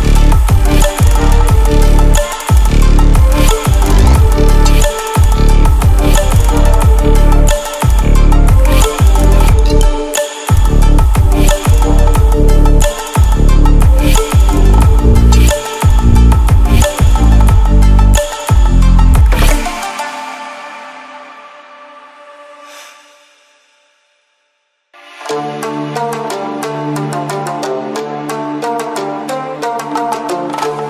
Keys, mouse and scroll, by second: 1.0 click, 4.4 ctrl+alt+scroll down 1, 7.0 click, 10.3-10.7 scroll up 1, 10.7-13.3 drag, 21.8-25.6 drag.